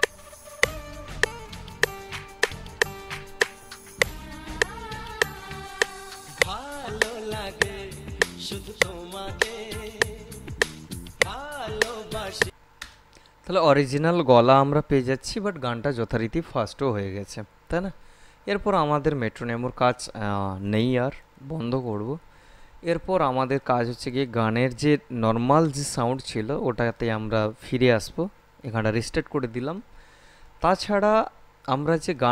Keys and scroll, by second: 12.6 space.